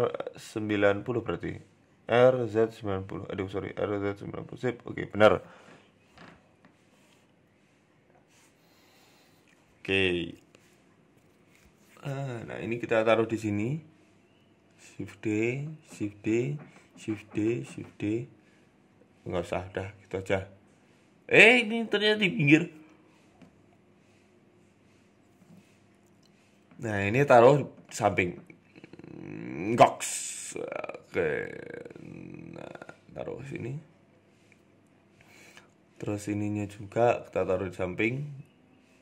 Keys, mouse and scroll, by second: 5.6 KP_3, 5.9 scroll up 3, 6.2 shift+middle click, 7.6 Tab, 9.0 Tab, 9.4 click, 11.0 s, 11.9 scroll up 3, 12.0 scroll down 1, 12.1 g, 13.3 s, 14.2 shift+d, 15.3 shift+middle click, 15.5 shift+d, 16.4 shift+d, 18.2 shift+d, 18.8 ctrl+z, 19.1 middle click, 19.7 KP_7, 20.2-20.5 scroll down 3, 20.5 shift+middle click, 20.8-21.1 scroll down 2, 21.2-21.6 scroll up 4, 21.5 shift+middle click, 22.1 click, 23.0 g, 25.1-25.4 scroll up 5, 25.4 shift+middle click, 25.7 a, 25.8 a, 26.5 l, 27.3 g, 30.8 a, 31.3 l, 31.9 g, 32.8 shift+middle click, 33.2 scroll up 1, 33.3 middle click, 35.1-37.4 typing.